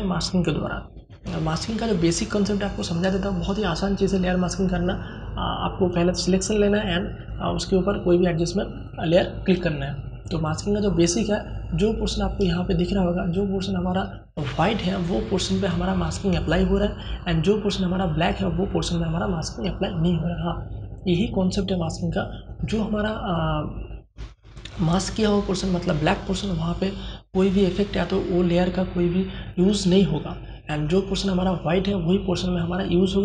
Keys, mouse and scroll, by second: 10.3 alt+click, 11.8 space, 12.1-22.1 ctrl+drag.